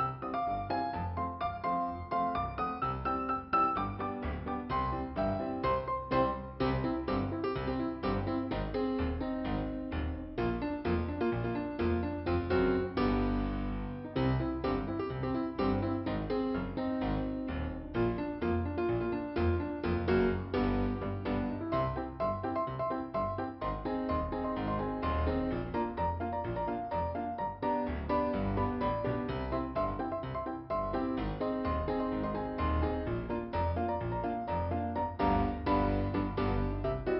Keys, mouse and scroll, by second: 5.0 click, 7.0 click, 8.1 click, 11.2 click, 12.5 scroll down 1, 13.6-14.3 scroll up 2, 15.0 click, 15.3-16.2 scroll down 1, 16.6 click, 18.6 scroll down 1, 19.9 click, 23.0 click, 26.3 click, 26.8 click, 26.9 double click, 28.2 double click, 32.5 click, 32.8 click, 33.2 click, 34.4 click, 36.9 scroll down 3.